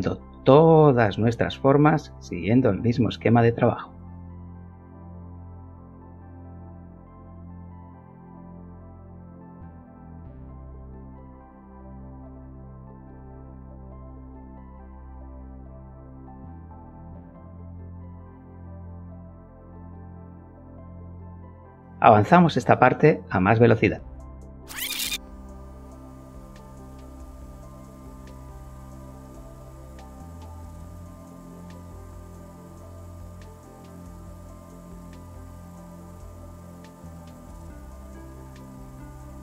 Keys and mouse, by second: 0.6 Return, 0.7 Tab, 1.9 click, 2.0 click, 3.6 shift+c, 4.0 Return, 6.8 click, 7.4 shift+click, 8.3 shift+click, 9.6 shift+click, 10.5 g, 11.5 click, 12.0 shift+click, 12.8 g, 15.0 click, 19.3 Tab, 21.8-22.9 drag, 24.6 click, 25.4 Tab, 25.8 click, 26.4 Return, 26.7 click, 26.9 click, 27.3 Tab, 27.7 click, 28.2 click, 28.5 click, 28.6 shift+click, 28.9 g, 29.0 middle click, 29.3 middle click, 30.0 click, 30.1 click, 30.5 g, 30.6 middle click, 31.2 click, 31.3 click, 31.3 g, 31.7 click, 32.9 Tab, 34.4 click, 34.8 o, 35.1 Tab, 35.9 shift+click, 36.1 g, 36.3 middle click, 36.7 middle click, 37.3 click, 37.6 Tab, 38.5 shift+click, 38.9 g, 39.1 z.